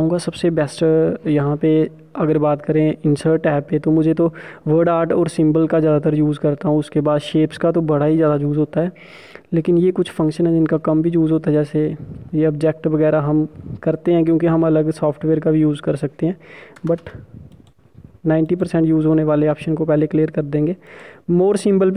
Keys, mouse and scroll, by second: 17.5 Return, 20.8 click.